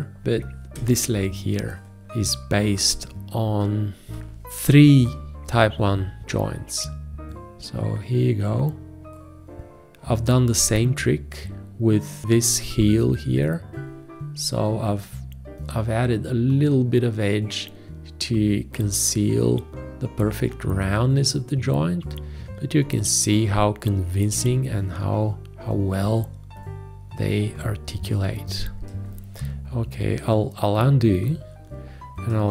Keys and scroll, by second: 0.7 ctrl+v, 4.2 Escape.